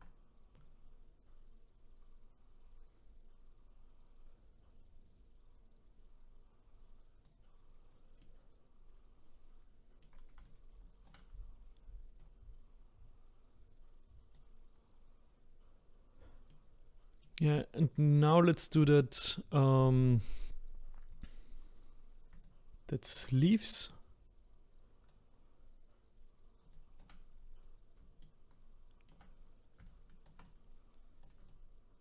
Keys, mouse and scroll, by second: 0.5-3.6 drag, 8.2-10.4 middle drag, 10.4-12.2 shift+right drag, 12.2-15.2 drag, 16.5-18.6 middle drag, 18.6-19.3 scroll down 1, 21.1 click, 22.4-26.6 ctrl+right drag, 26.7 shift+right click, 27.2-28.2 scroll up 5, 28.2-29.8 shift+middle drag, 29.8-32.0 ctrl+right drag.